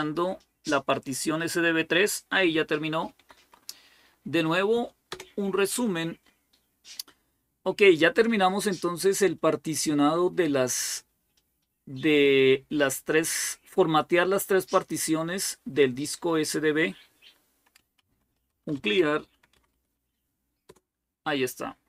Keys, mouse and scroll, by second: 3.1 Up, 3.3 Up, 4.9 Return, 17.6-19.2 typing, 19.3 Up, 19.5 Up, 20.2 typing.